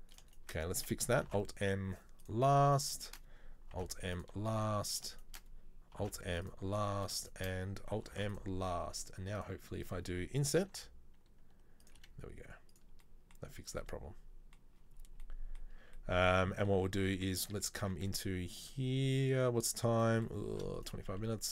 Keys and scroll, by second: 1.4 alt+m, 3.8 alt+m, 6.1 alt+m, 8.3 alt+m, 10.8 i, 12.0 e, 20.6 shift+d, 21.2 s.